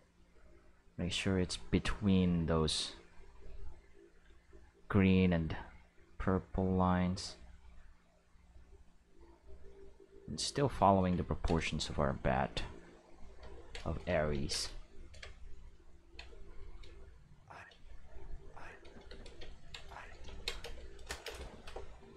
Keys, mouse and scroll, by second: 0.3-1.3 drag, 3.0-4.9 drag, 6.0 click, 7.6 click, 9.5-10.6 drag, 11.7-12.9 shift+middle drag, 12.9 click, 13.5 ctrl+middle click, 14.3 ctrl+z, 16.0 ctrl+middle click, 16.6 click, 16.8-19.0 typing, 17.6 click, 18.8 click, 19.5 ctrl+middle click, 19.9 shift+middle click, 20.6 space, 20.9 click, 21.2 space.